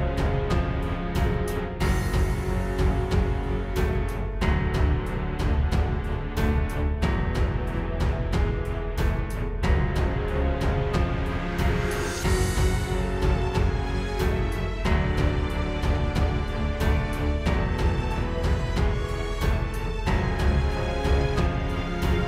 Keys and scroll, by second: 4.9 space, 5.2 space, 5.7 space, 6.2 alt+super+space, 6.7 super+space, 11.4 alt+j, 11.9 super+j, 15.7 space, 16.4 space, 18.5 space, 19.2 space, 20.1 space, 20.4 space, 21.9 space.